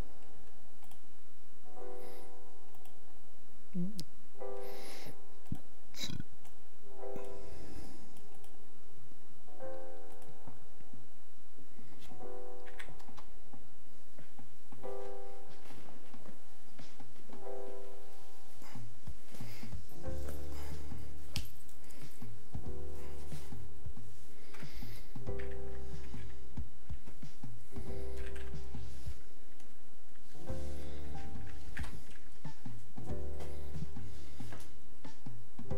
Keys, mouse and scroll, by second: 6.4 click, 7.8 click, 8.5 click, 31.5 click.